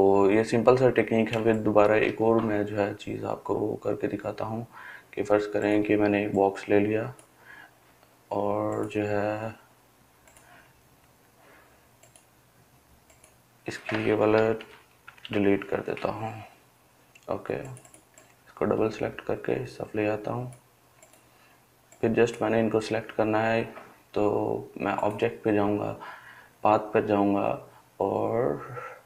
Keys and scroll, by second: 14.8 Delete.